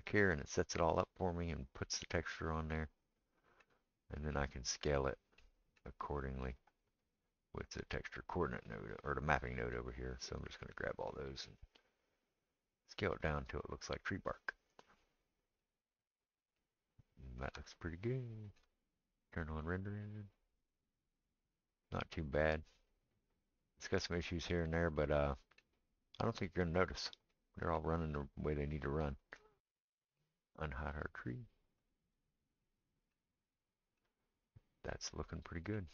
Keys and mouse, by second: 0.0-11.4 right drag, 10.4-19.8 drag, 10.4-11.4 middle drag, 17.6-22.0 shift+middle drag, 17.6-33.9 shift+right drag, 30.5 click, 30.5 middle click, 31.8 click, 33.9-35.9 shift+middle drag.